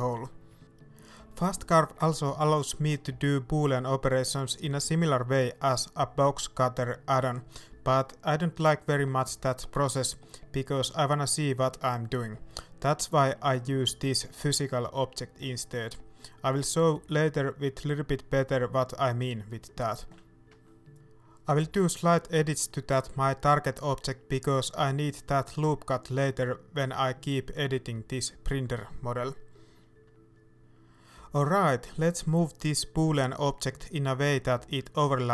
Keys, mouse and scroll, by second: 0.1 middle click, 2.2 KP_1, 3.9-4.5 scroll up 1, 4.5 s, 9.1 Tab, 12.3 right click, 13.1 g, 15.0-17.3 middle drag, 16.5 scroll up 2, 16.8 Tab, 17.3-18.9 right drag, 18.9 ctrl+b, 20.7 ctrl+r, 21.3 click, 21.9 ctrl+r, 23.3 right click, 23.5 middle click, 25.1 click, 25.8-27.8 right drag, 27.8 j, 28.1 middle click, 29.2-30.7 right drag, 30.7 j, 34.8 shift+click, 35.0 middle click.